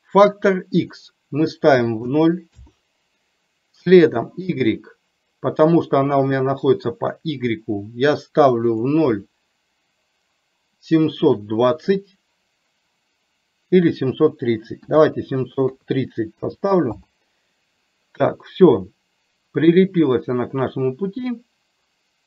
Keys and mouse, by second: 0.9-2.6 drag, 4.6-17.1 drag.